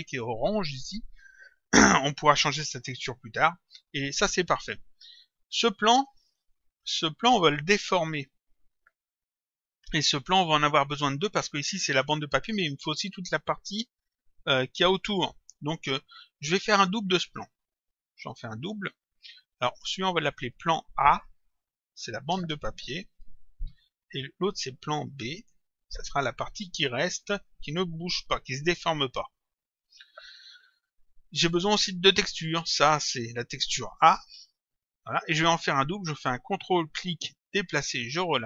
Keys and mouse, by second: 5.3 click, 16.5 click, 17.9 ctrl+click, 19.7 click, 22.1 End, 22.4 space, 23.2 shift+a, 24.4 click, 26.6 End, 27.0 BackSpace, 27.5 space, 28.3 shift+b, 29.7 click, 33.0 click, 34.5 shift+a, 35.1 click, 36.9 ctrl+click.